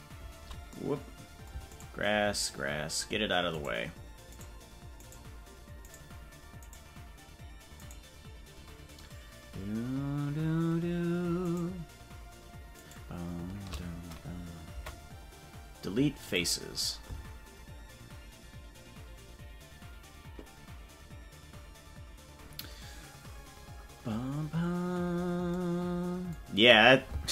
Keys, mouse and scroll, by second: 2.2 shift+right click, 5.6 shift+right click, 8.3-12.4 shift+right drag, 14.7 Delete.